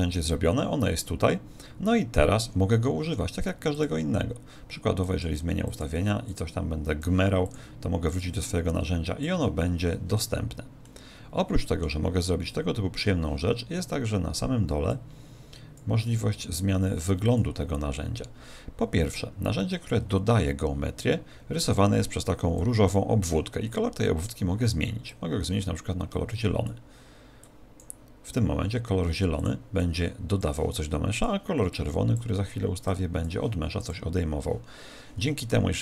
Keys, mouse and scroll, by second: 5.0 click, 5.6 click, 6.2 click, 7.4 click, 9.2 click, 10.8 middle click, 14.8 click, 17.2 click, 21.0 click, 24.2 click, 29.8 click, 31.1 click.